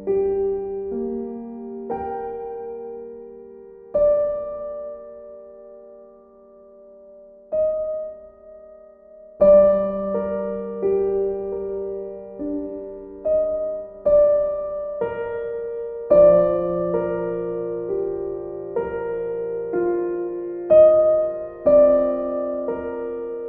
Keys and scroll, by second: 13.5 b.